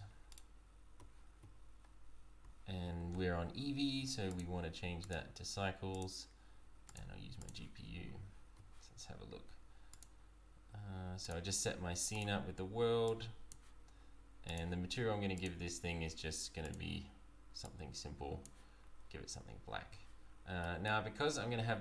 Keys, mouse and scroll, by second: 1.0 z, 2.4 z, 4.3 click, 8.2 z, 10.0 click, 15.1 click, 15.5 click, 18.9 scroll down 2, 19.4 z, 20.2-20.6 scroll up 3, 20.6 middle click, 21.3 scroll down 1.